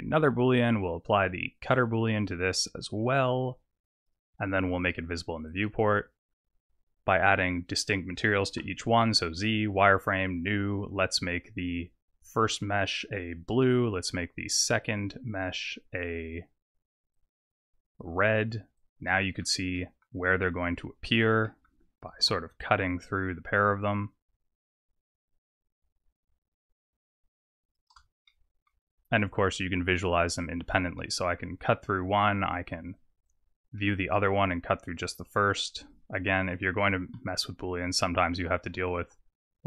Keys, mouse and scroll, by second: 3.1 click, 5.5 click, 7.7 click, 8.6 z, 9.9 click, 14.8 click, 15.6 click, 17.1 click, 18.8 click, 19.0 middle click, 19.7 middle click, 21.0 click, 21.4 middle click, 22.1 g, 30.0 middle click, 30.4 click, 31.0 middle click, 33.0 click, 33.3 click, 33.8 middle click, 35.9 click, 36.5 click, 36.9 g.